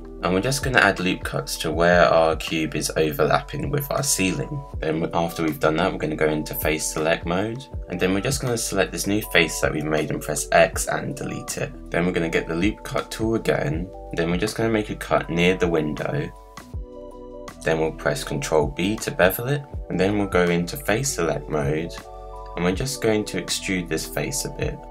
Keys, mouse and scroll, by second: 9.6 x, 11.7-16.4 drag, 16.5 click, 18.5 ctrl+b, 20.5 scroll up 1, 20.6 middle click, 21.5 click, 22.5 z, 23.0 click, 23.9 e, 24.8 middle click.